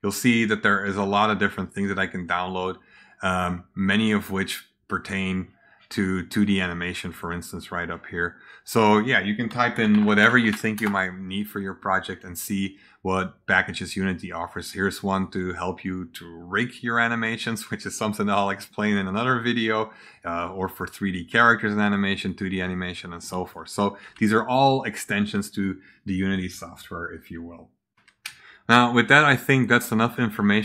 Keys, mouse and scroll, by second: 0.3-1.0 scroll down 2, 1.2-1.9 scroll up 2, 3.4 scroll up 2, 4.5 middle click, 4.9 middle click, 7.2 click, 8.7 click, 9.2-11.0 typing, 14.5 click, 15.1 click, 20.1 click, 22.2 click, 23.1-23.4 drag, 30.0 click.